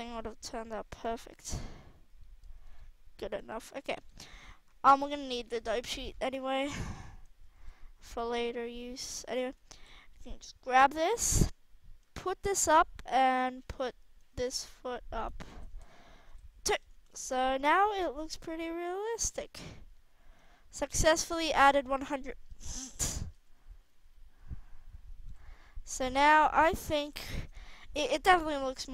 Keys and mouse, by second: 0.0 g, 5.5 alt+a, 7.5 alt+a, 8.1-8.5 drag, 9.7 KP_3, 9.7 click, 11.9-12.8 drag, 13.7 middle click, 14.3 g, 15.4 a, 15.6 a, 16.2 i, 17.1 alt+a, 19.2 alt+a, 23.2 alt+a, 25.2 alt+a, 27.0 KP_1.